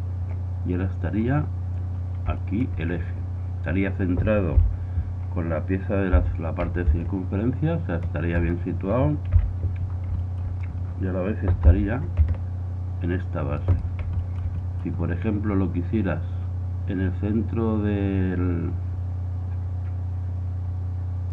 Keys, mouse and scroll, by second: 1.4-4.4 middle drag, 4.6 KP_7, 6.2 r, 9.3 KP_1, 10.0-12.7 middle drag, 11.8 r, 14.3-14.9 middle drag, 16.6-21.3 middle drag.